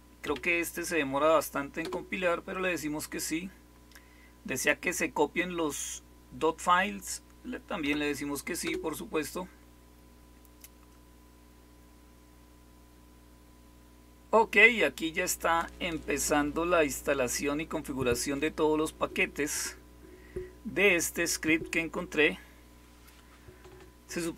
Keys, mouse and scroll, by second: 0.2 y, 1.7 Return, 7.8 y, 8.6 Return.